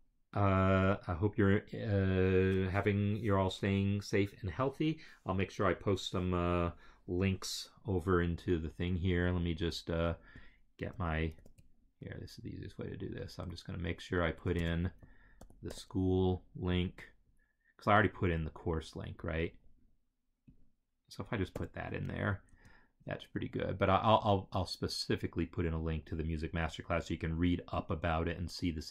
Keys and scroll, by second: 11.3 ctrl+c, 13.4 Right, 14.6 BackSpace, 15.3 ctrl+a, 15.6 ctrl+c, 21.5 ctrl+v, 22.4 Return.